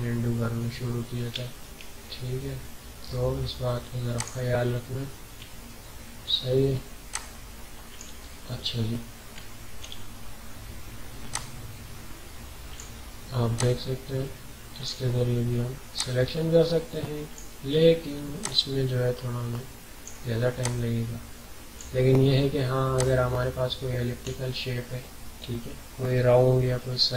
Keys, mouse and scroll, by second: 0.6 alt+scroll down 1, 1.5 ctrl+scroll down 1, 4.1 click, 5.0 typing, 5.5-6.6 ctrl+scroll down 4, 7.0 typing, 7.1-8.7 drag, 8.7 alt+scroll down 1, 9.4-9.8 ctrl+scroll down 2, 11.3-20.6 drag, 11.5 typing, 20.6-26.9 drag, 23.9 typing.